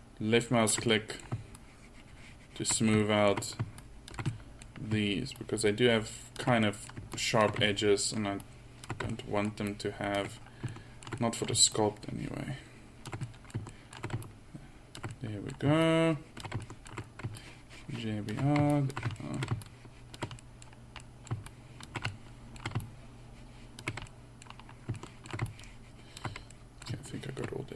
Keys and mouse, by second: 0.9-3.2 middle drag, 4.3-5.0 middle drag, 11.4-13.3 middle drag, 13.3-14.0 drag, 14.3-16.9 drag, 20.7-21.1 middle drag, 24.3-24.6 middle drag, 25.5-27.2 middle drag.